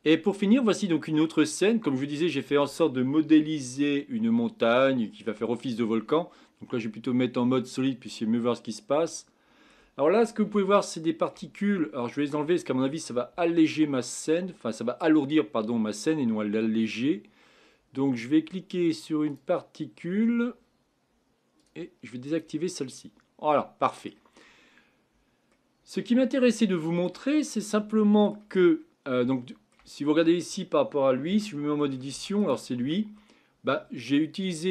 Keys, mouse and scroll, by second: 0.9-7.1 middle drag, 8.0-8.6 drag, 8.6-11.8 middle drag, 11.8-12.8 scroll up 5, 12.8-13.2 scroll down 4, 13.7-16.4 shift+middle drag, 19.3 click, 21.8 click, 22.4 click, 22.9-24.5 middle drag, 24.5-25.1 scroll up 4, 25.1-25.5 scroll down 2, 25.5-27.4 middle drag, 27.4-27.7 scroll down 3, 27.7-28.6 middle drag, 28.6-29.3 scroll up 2, 29.3-29.9 shift+middle drag, 29.9-30.4 scroll up 2, 30.4 click, 31.3 Tab, 31.8 middle click, 32.1 Tab, 32.4 click, 32.9 Tab, 33.2-34.3 middle drag, 34.3-34.7 scroll down 3.